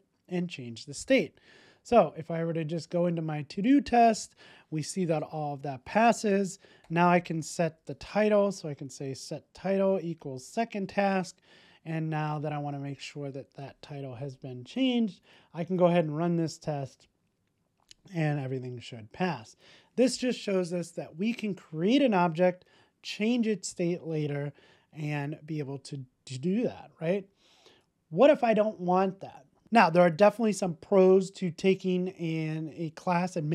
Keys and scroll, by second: 12.9 super+s.